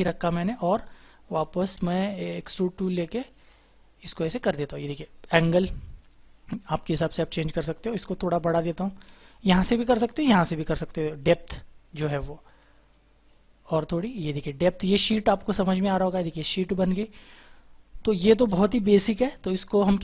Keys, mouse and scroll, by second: 11.9 scroll up 1, 14.3-15.7 scroll down 1, 15.7 double click, 16.2-16.6 scroll down 1, 16.6-17.4 scroll up 1.